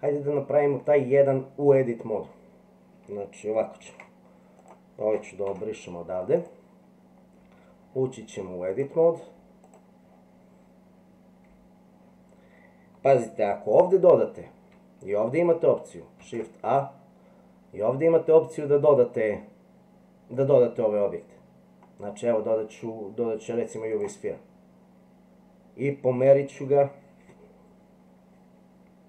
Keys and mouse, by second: 3.8 ctrl+z, 5.5 Delete, 6.4 click, 8.8-9.8 drag.